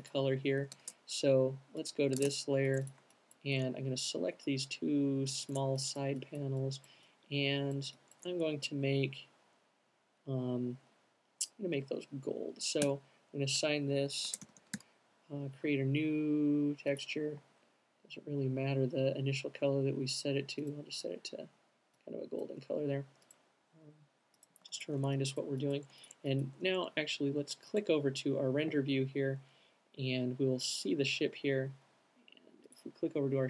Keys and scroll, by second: 0.9 space, 12.9 m, 14.1-15.1 typing, 16.9-17.7 typing, 24.3 alt+q.